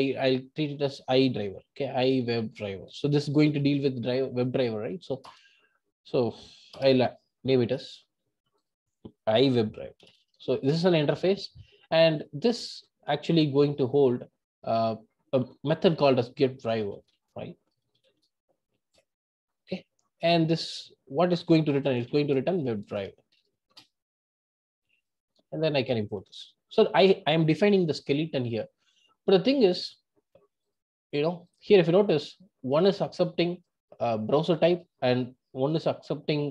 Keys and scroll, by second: 10.7 Return.